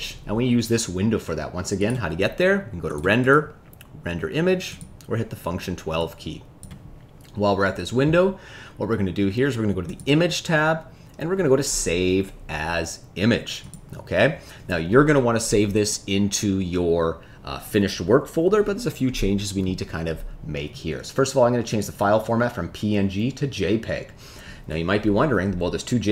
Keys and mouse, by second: 2.8 click, 3.3-5.4 drag.